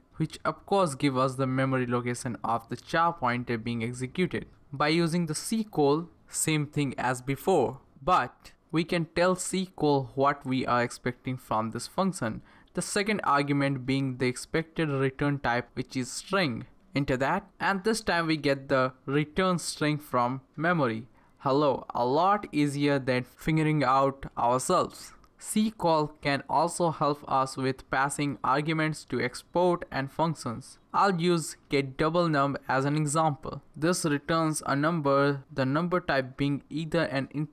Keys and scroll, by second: 0.0 Return, 3.8-7.2 typing, 9.5 Up, 9.7 Left, 10.5-12.8 typing, 14.2 Left, 14.3-16.5 typing, 16.5 Right, 16.9 Right, 16.9 Right, 17.2 Right, 17.4 Return, 24.9 Up, 26.5 Left, 26.7 Left, 27.0 Right, 30.8-37.5 typing.